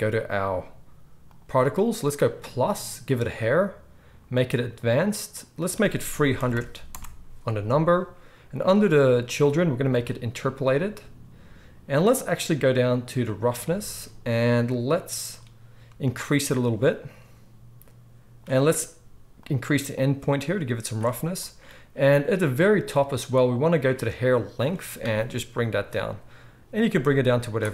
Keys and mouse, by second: 2.2-3.1 drag, 3.1-4.5 middle drag, 4.5 click, 4.6 middle click, 5.5-9.9 drag, 6.5 0, 9.9-13.2 middle drag, 13.2-27.7 drag.